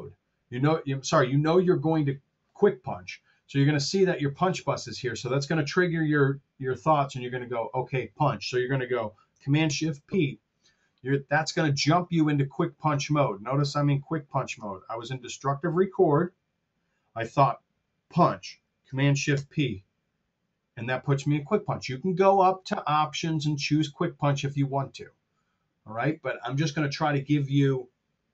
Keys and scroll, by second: 9.6 shift+super+p, 19.1 shift+super+p.